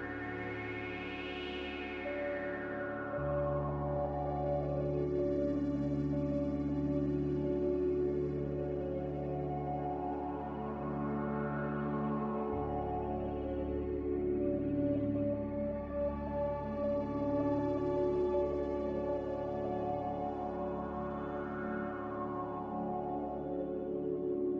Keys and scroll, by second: 7.1 ctrl+z, 14.9 ctrl+z, 15.4 ctrl+z, 20.9 ctrl+z, 21.4 ctrl+z.